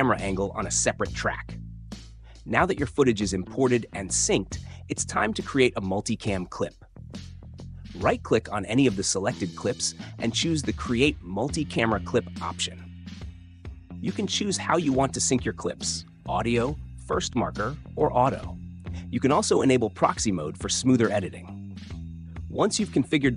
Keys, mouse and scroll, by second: 1.0-2.0 drag, 2.1 click, 3.9 right click, 11.9 click, 13.1-14.0 typing, 14.7 click, 19.4-20.4 drag, 22.7-23.3 drag.